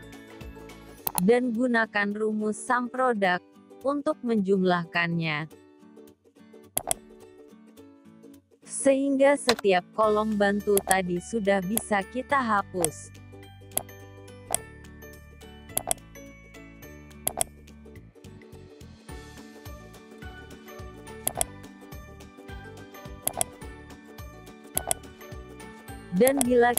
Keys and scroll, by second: 19.3 ctrl+x, 22.5 ctrl+v.